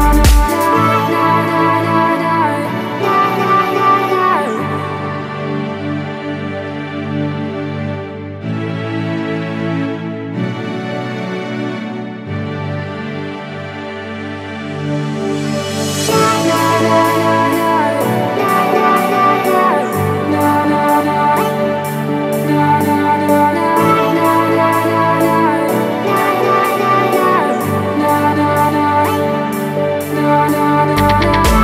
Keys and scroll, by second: 0.9 super+-, 19.3 super+c, 27.2 super+v, 31.5 super+c.